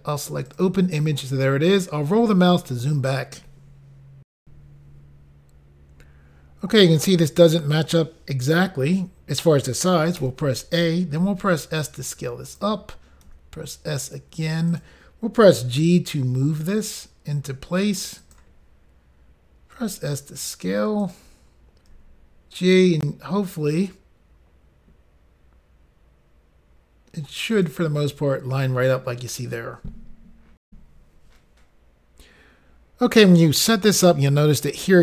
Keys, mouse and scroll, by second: 0.6 click, 1.7 scroll down 3, 4.4 Insert, 5.5 Pause, 11.2 a, 11.2 s, 12.4 click, 13.2 s, 14.7 click, 14.8 click, 15.6 g, 18.2 click, 19.8 s, 21.0 click, 21.9 g, 27.5 click, 27.6 click, 30.6 Insert, 31.7 Pause.